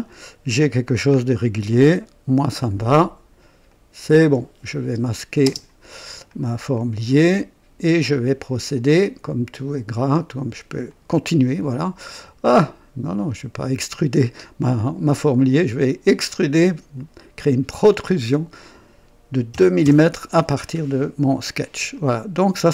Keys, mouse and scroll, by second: 1.1 scroll down 1, 1.7-2.9 right drag, 3.6 click, 4.2 typing, 4.9 click, 5.4 typing, 6.3-7.1 drag, 7.3 click, 10.8 click, 13.2 click, 15.4 click, 17.7 click, 19.4 KP_2, 19.8 KP_Enter, 21.9-22.7 drag.